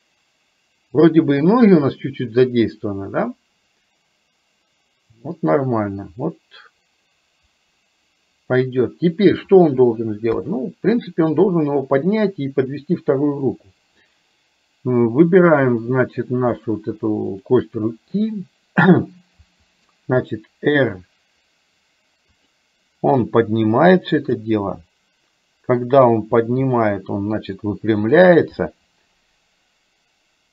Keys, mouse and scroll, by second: 10.3 KP_3, 15.6 click, 17.3 shift+click, 19.6 r, 24.2 click, 26.3 r, 28.7-30.5 middle drag.